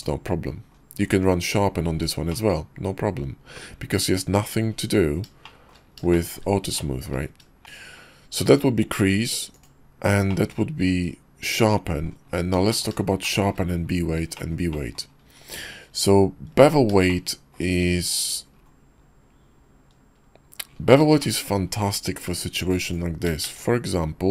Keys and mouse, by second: 2.3-3.6 middle drag, 5.4 shift+middle click, 6.1 shift+middle click, 6.7 shift+middle click, 10.3-12.1 middle drag, 12.7 middle click, 13.0 shift+middle click, 14.4 shift+middle click, 14.7 middle drag, 17.0 shift+middle click, 18.2-18.5 middle drag, 20.9 middle click, 21.2 shift+middle click, 22.5 click, 22.7 x, 23.4 shift+a.